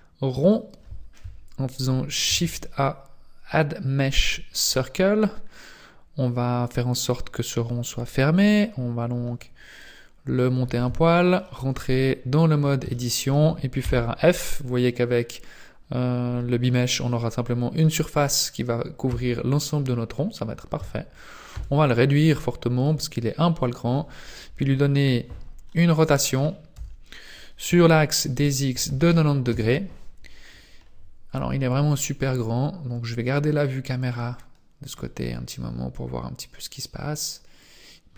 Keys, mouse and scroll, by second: 0.5 click, 2.3 shift+a, 4.6 shift+a, 5.5-6.1 scroll up 4, 6.7-7.3 scroll down 1, 9.7 click, 10.9 Tab, 11.4 middle click, 12.3 scroll up 2, 12.9 shift+middle click, 13.8 f, 19.1 Tab, 20.7 Tab, 21.5 s, 25.6 middle click, 25.6 scroll down 1, 26.7 r, 31.9-33.2 scroll up 3, 33.9 click, 35.2-35.7 scroll down 3, 36.0-37.1 scroll up 1, 37.6 click.